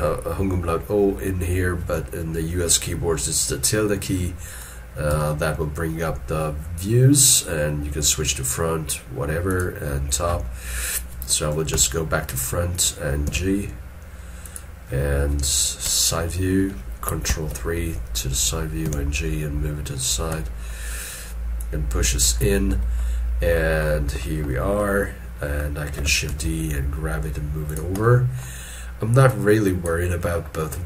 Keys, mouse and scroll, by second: 5.1 ö, 11.7 1, 17.3 ctrl+3, 18.8 g, 20.4 middle click, 22.5 scroll down 1, 23.0 shift+middle click, 23.9 middle click, 26.3 shift+d, 28.0 middle click.